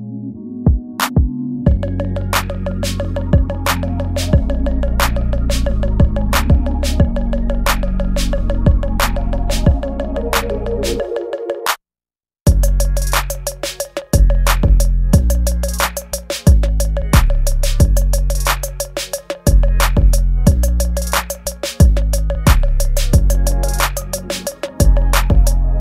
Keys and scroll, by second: 0.0 space, 0.1 ctrl+z, 0.7 space, 1.4 space, 1.4 ctrl+z, 3.2 space, 4.3 ctrl+z, 4.6 space, 5.5 ctrl+z, 5.6 space, 6.7 ctrl+z, 8.0 space, 9.2 space, 10.3 ctrl+z, 10.8 space, 11.7 space, 12.7 ctrl+z, 14.0 space, 15.0 ctrl+z, 15.7 space, 17.3 ctrl+z, 24.0 space, 24.6 ctrl+z, 24.9 ctrl+z, 25.7 ctrl+z.